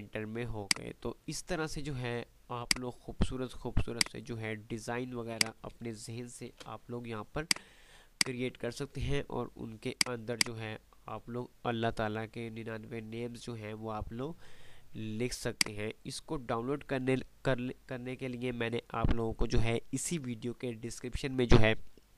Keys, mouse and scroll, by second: 0.8 click, 6.8 shift+Page_Down, 7.6-9.1 drag, 10.1 right click, 10.6 click, 11.4 F3, 14.8 F2, 15.7-17.6 drag.